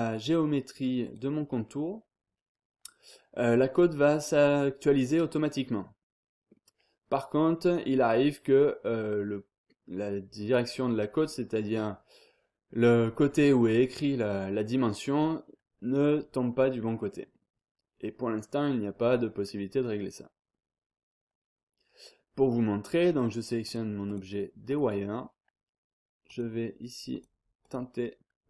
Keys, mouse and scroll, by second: 0.1-0.6 scroll up 1, 1.0 click, 1.3 scroll down 1, 1.6-2.2 scroll up 2, 3.0-3.5 scroll up 2, 4.0-4.5 scroll up 2, 5.3-5.7 scroll down 2, 5.7-6.4 scroll up 2, 6.4-7.0 scroll down 2, 7.1-7.6 scroll up 2, 8.0-8.6 scroll down 2, 9.4-10.0 scroll up 2, 11.2-11.9 scroll down 2, 13.6-14.1 scroll up 2, 14.1-14.8 scroll down 2, 15.2-15.5 scroll down 2, 15.5-16.2 scroll up 2, 16.3-17.3 scroll down 2, 17.5-18.0 scroll up 2, 18.7-19.1 scroll up 2, 19.1-19.7 scroll down 2, 19.7-20.3 scroll up 1, 22.8 click, 23.6-24.6 drag, 24.9 click, 26.2 click, 27.1 click.